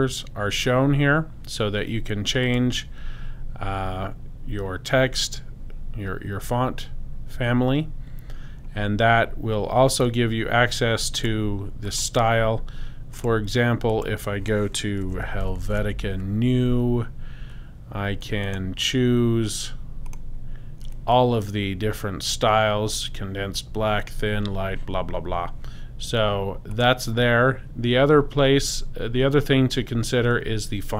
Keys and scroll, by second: 14.8-16.3 typing.